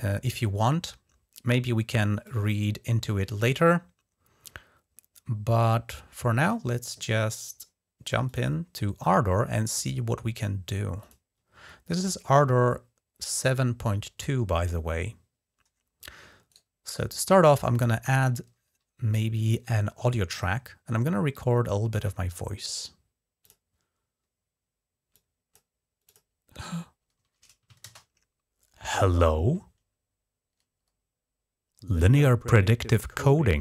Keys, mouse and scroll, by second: 2.0-8.3 drag, 10.8 click, 16.3-18.5 right drag, 23.2 click, 24.9 click, 25.8 click, 27.6 shift+space.